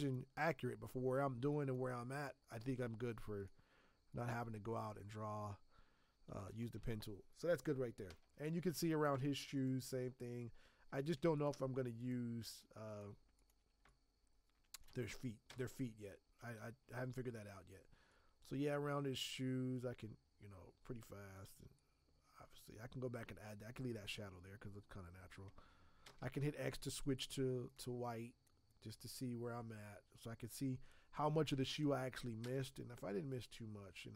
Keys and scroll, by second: 2.6 x, 9.1 x, 10.9 z, 13.8 space, 15.4 x, 16.5 b, 26.0 x, 32.4 x.